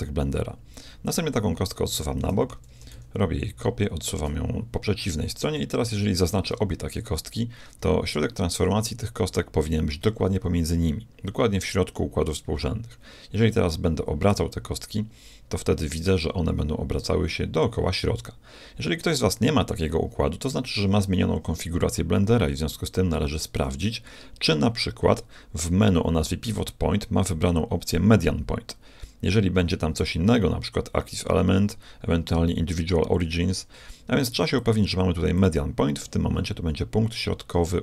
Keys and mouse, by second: 1.1-3.0 drag, 2.7 shift+d, 6.2-8.0 drag, 14.4 r, 25.6-27.6 drag, 33.7 z, 34.6 click, 35.4 click.